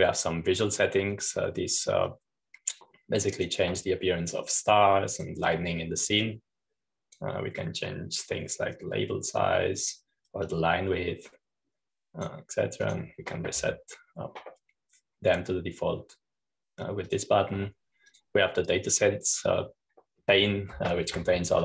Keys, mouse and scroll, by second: 0.0 click, 1.1 click, 3.7-7.6 drag, 7.8-9.9 drag, 10.1-15.4 drag, 18.7 click, 19.7-21.0 drag.